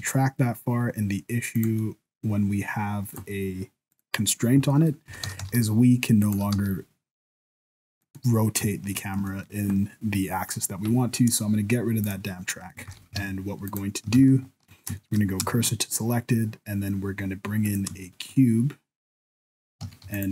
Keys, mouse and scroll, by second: 1.8 middle click, 3.1 click, 3.9 click, 4.7 scroll up 1, 5.1 r, 6.4 r, 8.2 middle click, 8.7 shift+middle click, 8.7 shift+scroll up 1, 9.3 middle click, 12.0 click, 12.5 middle click, 12.9 ctrl+s, 13.2 alt+a, 13.7 right click, 14.2 shift+s, 15.1 shift+middle click, 15.1 shift+scroll up 1, 15.5 shift+a, 18.2 shift+middle click, 18.7-19.5 scroll up 1, 19.5 middle click, 19.8 Tab, 20.0 3, 20.1 right click.